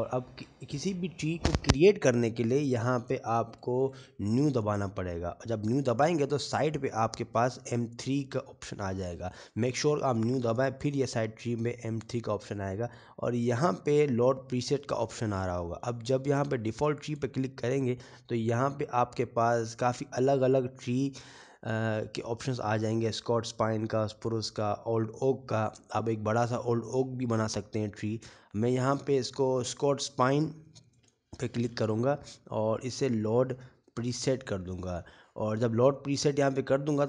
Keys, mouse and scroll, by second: 4.4-5.4 scroll up 2, 5.6 shift+middle click, 6.6 click, 13.9 click, 19.1 click, 36.2 click.